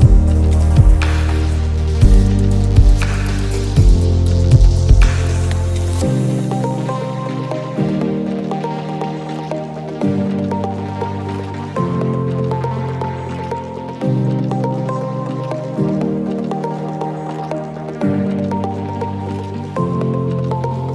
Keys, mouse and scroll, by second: 2.4 ctrl+z, 3.1 click, 4.9 ctrl+z, 5.5 click, 5.9 alt+scroll down 1, 6.7 click, 8.9 alt+scroll up 1, 9.2 click, 10.6 ctrl+z, 12.1 click, 17.8 scroll down 2, 17.9 space, 18.0 click, 18.1 space, 18.8 click, 19.4 alt+scroll up 1, 19.7 alt+scroll down 1, 19.8 space, 20.4-20.9 alt+scroll down 4, 20.7 space.